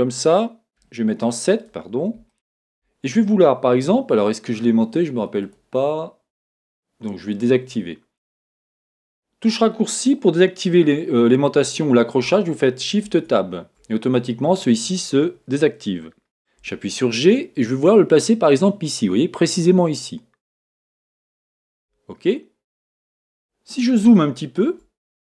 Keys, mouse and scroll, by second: 0.8 KP_7, 2.3-5.4 shift+middle drag, 5.4-7.4 drag, 13.0 shift+Tab, 16.6 g, 21.6 click, 23.5 scroll up 1, 24.2 shift+middle click, 25.0 scroll up 1.